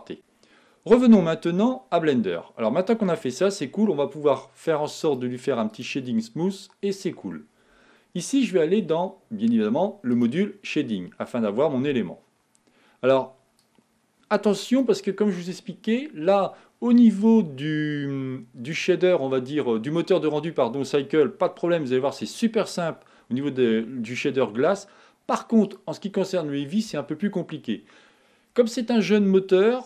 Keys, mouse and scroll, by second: 1.6-4.2 middle drag, 5.1-8.0 right drag, 10.5 click, 13.8-19.3 drag, 26.0 click.